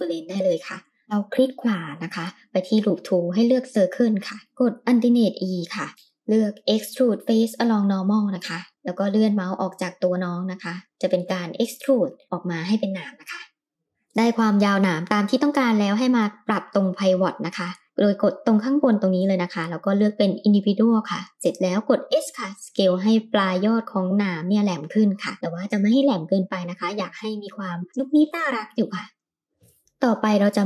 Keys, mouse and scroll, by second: 0.5 right click, 4.7 alt+e, 13.7 middle click, 18.1 click, 21.8 s, 28.0-29.8 middle drag, 30.1 middle click.